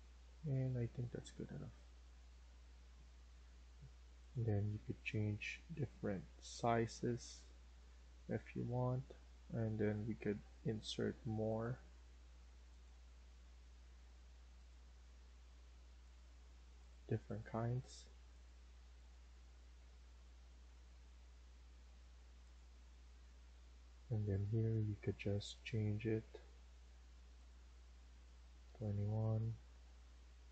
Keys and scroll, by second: 28.3 Escape, 28.6 Escape.